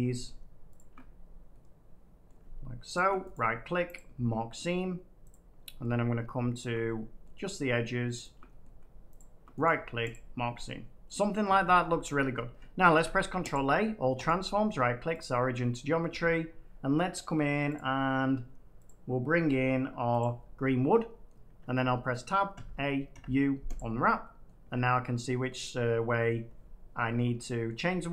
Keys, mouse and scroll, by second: 0.7 click, 2.2 middle click, 2.9 click, 3.2 right click, 3.9 click, 4.5 middle click, 5.2 click, 5.6 scroll up 1, 5.8 middle click, 6.5 shift+click, 7.2 middle click, 8.1 shift+click, 8.6 middle click, 9.1 shift+click, 9.6 click, 10.0 click, 10.3 scroll down 1, 10.5 middle click, 11.3 middle click, 12.1 scroll, 12.2 Tab, 12.8 ctrl+a, 13.4 click, 14.2 right click, 15.1 click, 17.7 click, 18.9 click, 20.1-21.1 drag, 21.2 middle click, 21.4 Tab, 22.5-23.2 typing, 23.7 click, 24.6 Tab, 24.9 middle click, 26.2-27.2 middle drag, 27.6 middle click.